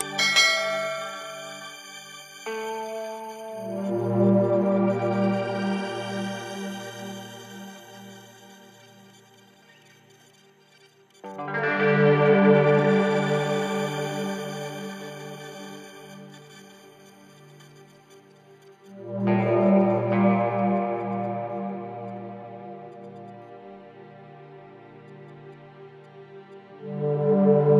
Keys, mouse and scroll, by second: 4.7 click, 8.4 ctrl+d, 9.6-23.4 drag.